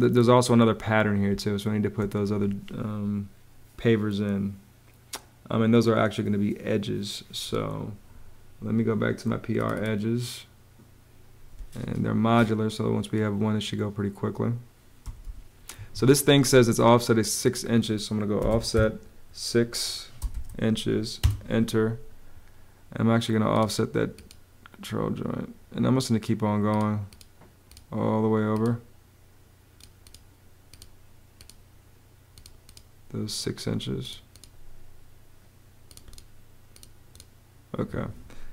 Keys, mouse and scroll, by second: 1.0 space, 11.2 space, 14.5-15.4 typing, 15.5 Escape, 18.1 o, 18.2 Home, 18.4 6, 20.9 Home, 37.5 Escape, 38.2-38.5 typing.